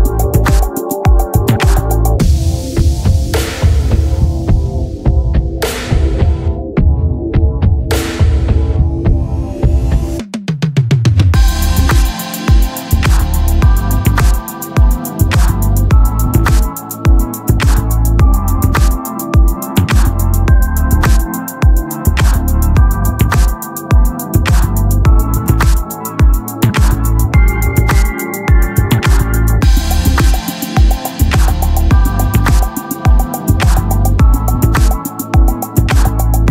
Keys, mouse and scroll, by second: 1.4 s, 3.6-4.7 middle drag, 6.7-12.7 drag, 13.6-15.4 right drag, 15.4 ctrl+l, 18.6-19.9 drag, 23.3-26.5 drag, 26.5 ctrl+l, 29.4 click, 32.1 click, 32.1 t, 34.2 right click, 34.7 ctrl+l, 36.3 right click.